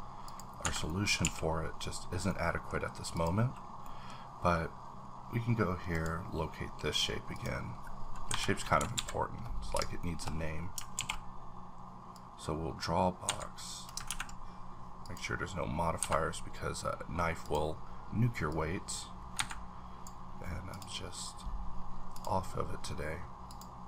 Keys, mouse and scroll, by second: 0.2 click, 0.6 Escape, 0.9 middle click, 1.2 a, 1.4-2.3 scroll up 2, 2.3-3.8 middle drag, 3.1 click, 5.1-5.9 scroll down 1, 5.9 click, 6.0 click, 6.4-7.3 scroll down 1, 7.3 click, 8.8 KP_4, 9.0 KP_7, 10.0 shift+middle click, 10.2-10.7 shift+scroll up 3, 10.9 alt+w, 12.1-14.0 drag, 13.2 Escape, 14.0 ctrl+`, 15.0 click, 15.2 ctrl+`, 16.0 Escape, 17.4 click, 18.8-19.3 drag, 22.1 click, 23.5 click.